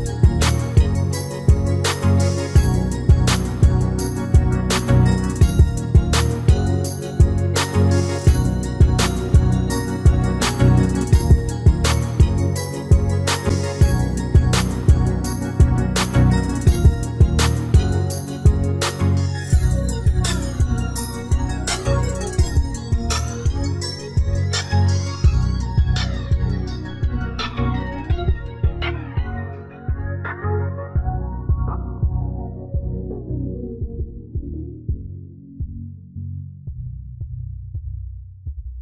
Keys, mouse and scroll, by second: 0.7 Tab, 1.1-2.7 middle drag, 2.7-4.5 drag, 4.9 a, 5.2 a, 7.0 shift+s, 8.9 shift+a, 12.8 r, 16.8 r, 19.9 s, 22.5-26.2 middle drag, 26.2 ctrl+r, 30.3 ctrl+r, 31.9-37.3 middle drag, 34.1 Tab, 37.3 ctrl+KP_7.